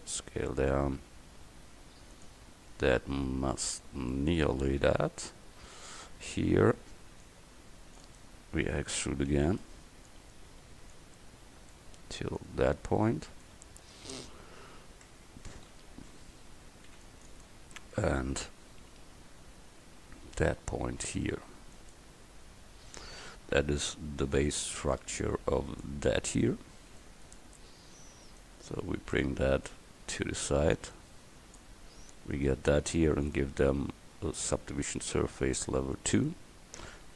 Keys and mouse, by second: 0.0 s, 4.9 a, 6.9 c, 8.1-10.1 drag, 9.4 e, 11.0-12.6 drag, 13.8 Tab, 14.3 a, 15.1 Tab, 15.7 a, 16.9 c, 17.4-18.6 drag, 18.6 g, 23.4 Tab, 24.4 right click, 28.3-31.0 right drag, 31.0-32.4 drag.